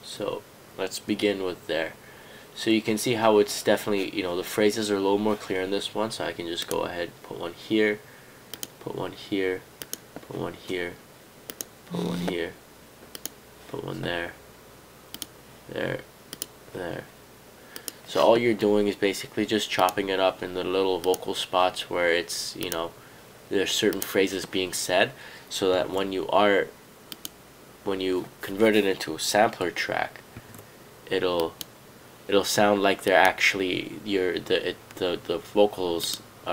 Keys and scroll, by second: 25.9 super+z, 30.4 super+z.